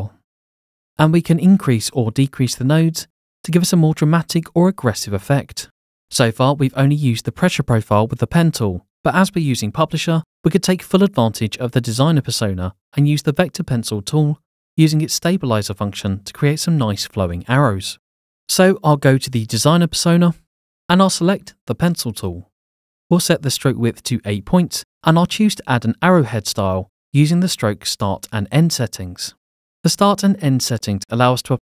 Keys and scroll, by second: 25.8 8, 26.1 Return.